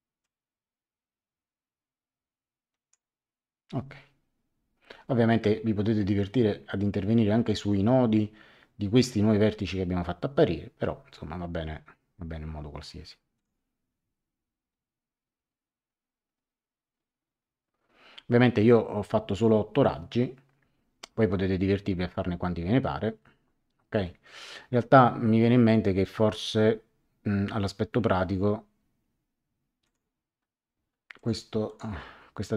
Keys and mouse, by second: 0.2 click, 13.3 click, 29.8 click, 31.1 click.